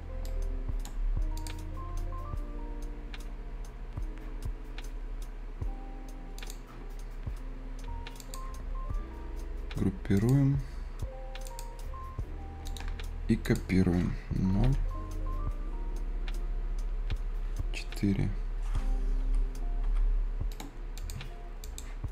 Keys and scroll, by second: 19.0 Return.